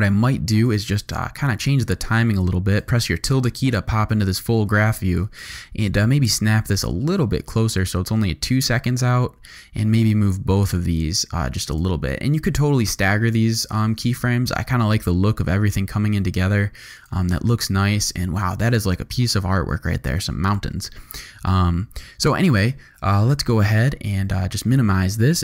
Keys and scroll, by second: 1.1 `, 20.6 `, 23.8 u.